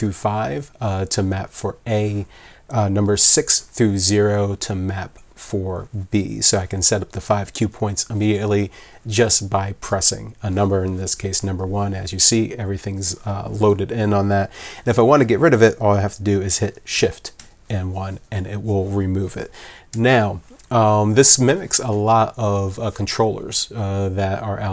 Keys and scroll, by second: 8.2 1, 17.4 shift+1, 19.9 1.